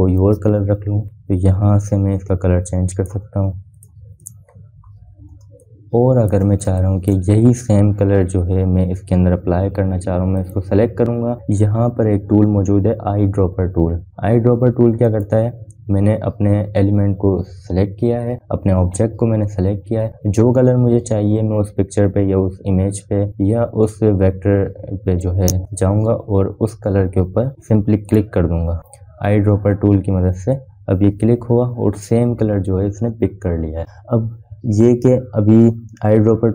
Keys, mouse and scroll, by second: 7.2 space, 7.4 click, 7.7 space, 8.6 click, 12.2 click, 16.9 click, 29.6 click.